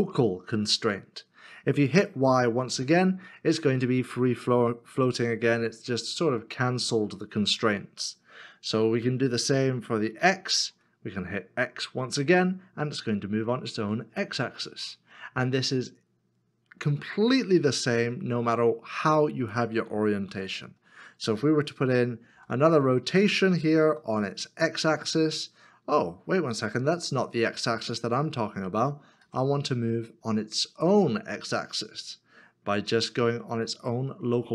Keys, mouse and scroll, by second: 2.8 y, 10.2 x, 12.2 x, 20.3 ctrl+z, 22.3 r, 23.8 x, 29.2 x.